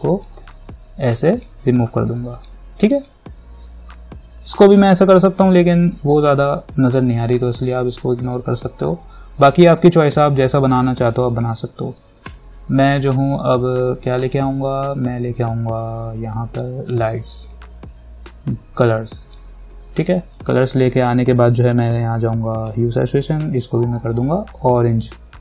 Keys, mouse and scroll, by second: 1.7-4.5 drag, 7.8 click, 11.5 click, 17.2-25.4 drag.